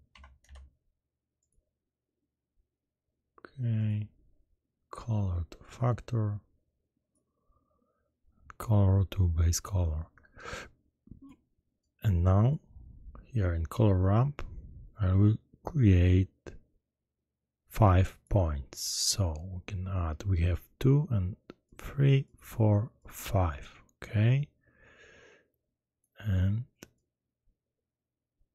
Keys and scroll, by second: 0.1 a, 0.4 d.